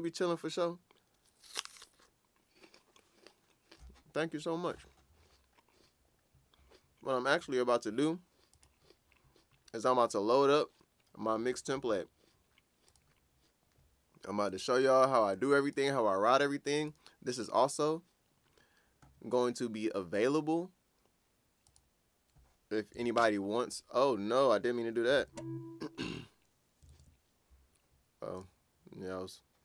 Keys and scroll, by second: 23.0 super+BackSpace, 25.2 super+z, 26.9 super+o.